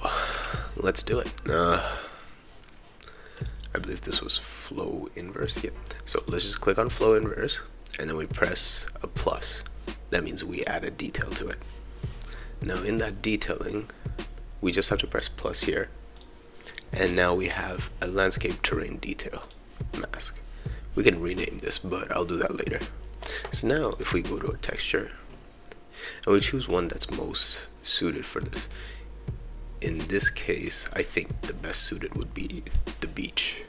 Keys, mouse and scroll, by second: 0.3 s, 3.3 click, 3.7 scroll down 2, 6.2 click, 9.3 click, 10.5 click, 16.1 click, 19.4 click, 23.8 click, 32.7-33.6 drag.